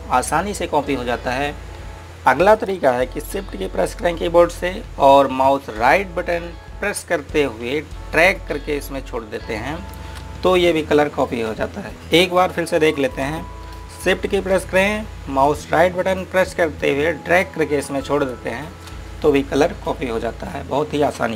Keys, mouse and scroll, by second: 3.6 click, 8.4 right click, 11.9 click, 15.0 shift+Num_Lock, 16.5 right click.